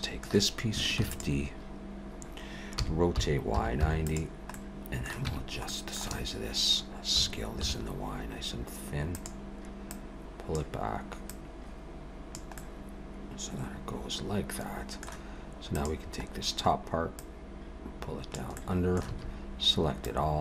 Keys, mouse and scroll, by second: 1.0 shift+d, 2.8 r, 4.5 middle click, 5.3 Tab, 5.7 middle click, 6.1 a, 7.2 s, 9.9 click, 11.3 click, 12.6 middle click, 15.6 click, 16.3-17.2 scroll down 2, 17.2 click, 18.5 middle click, 19.1 a, 20.0 click.